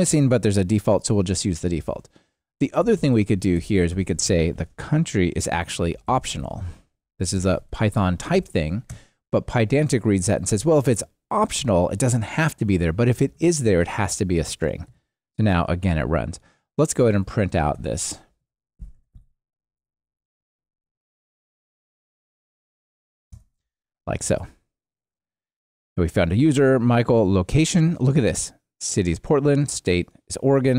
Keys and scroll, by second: 3.9 alt+shift+Left, 4.5 super+x, 8.3 alt+Return, 11.6 alt+shift+Right, 23.3 Return, 24.2 ctrl+r.